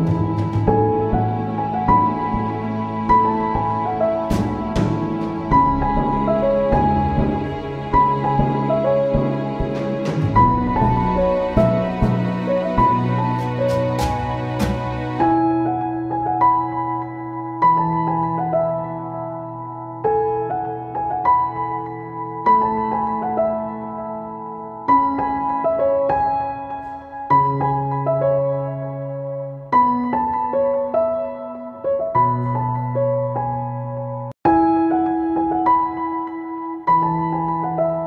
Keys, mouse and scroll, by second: 1.1-3.9 shift+drag, 3.9 ctrl+c, 4.3 ctrl+v, 5.0-11.7 drag, 11.9 click, 12.9 ctrl+c, 13.2 ctrl+v, 13.8-18.7 drag, 18.7 ctrl+z, 19.2 click, 23.7 Return, 24.2 ctrl+s, 27.4 click, 28.7 right click, 29.1 click, 33.9-36.4 drag.